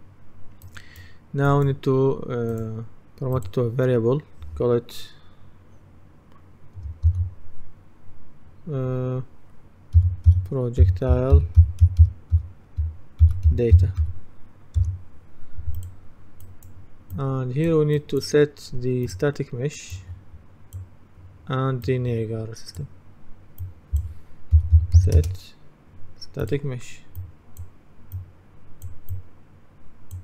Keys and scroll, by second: 7.1 shift+p, 10.9-14.5 typing, 14.8 Return, 24.3-25.3 typing.